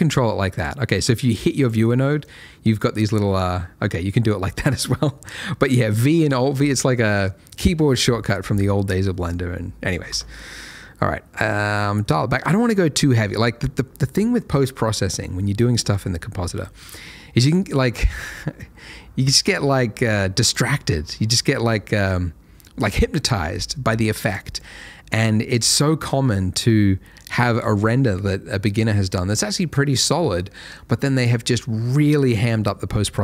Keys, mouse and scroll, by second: 5.1 middle click, 9.1 middle click, 9.4-10.3 scroll up 1, 10.3 click, 12.0 middle click, 16.8 click, 24.3 click, 24.5 double click.